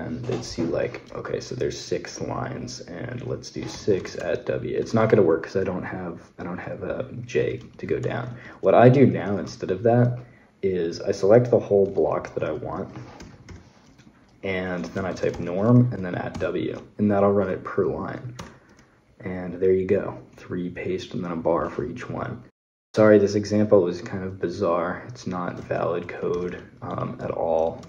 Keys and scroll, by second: 3.5-3.9 typing, 4.8 Escape, 7.4 Escape, 8.1 Escape, 11.7 shift+v, 12.7-16.1 typing, 18.2 Return.